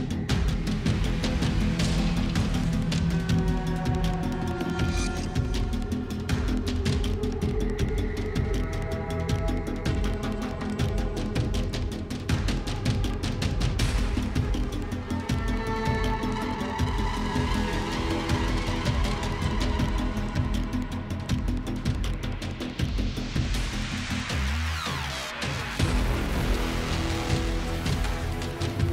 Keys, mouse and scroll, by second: 2.1 click, 2.5-3.7 typing, 4.4-5.5 Tab, 6.4 click, 9.6 click, 12.5 typing, 13.2 Tab, 13.6-14.5 typing, 14.7 click, 16.2 click, 17.1 click, 17.6 1, 17.7 1, 19.7 click, 20.7-22.0 typing, 23.3 click, 25.3 click, 26.0 typing, 27.4 Tab, 27.6 Tab, 28.4-28.9 typing.